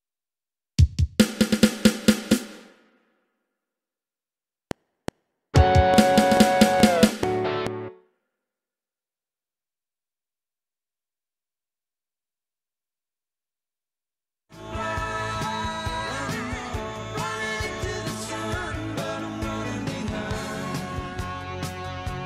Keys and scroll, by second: 3.3 Right, 3.7 Left, 4.5 F7, 7.8 space, 11.9 Down, 13.9 ctrl+shift+Left, 14.5 space.